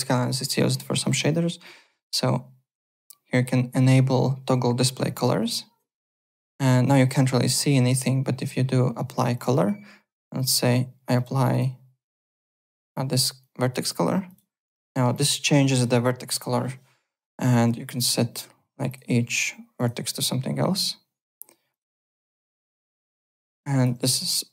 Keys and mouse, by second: 5.0 click, 7.0 click, 9.3 click, 10.3 click, 11.1 click, 12.8 click, 13.4 click, 14.2 click, 15.1 alt+click, 18.0 1, 18.0 click, 18.9 click, 19.7 click, 21.7 click, 22.4 click, 22.9 alt+click.